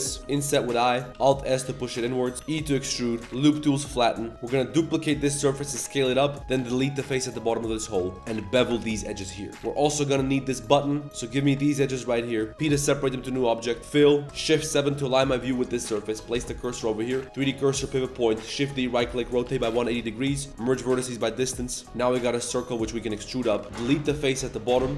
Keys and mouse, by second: 0.2 i, 1.2 alt+s, 2.4 e, 3.2 s, 3.2 w, 4.1 drag, 4.3 shift+v, 4.5 shift+d, 5.4 s, 6.5 x, 7.3 z, 7.4 middle drag, 7.8 2, 8.0 alt+click, 8.3 ctrl+z, 8.5 ctrl+b, 9.5 Tab, 9.5 ctrl+s, 9.5 a, 11.0 z, 11.0 2, 11.6 middle click, 12.1 middle click, 12.6 p, 13.0 Tab, 13.6 Tab, 13.7 1, 13.8 a, 13.8 f, 14.5 shift+KP_7, 16.1 2, 16.1 click, 16.3 shift+s, 16.7 a, 17.5 click, 18.4 shift+d, 19.1 r, 19.9 a, 20.5 m, 21.5-24.9 typing, 21.7 click, 21.7 middle click, 21.7 right click, 22.0 middle click, 23.6 Tab, 24.7 Tab.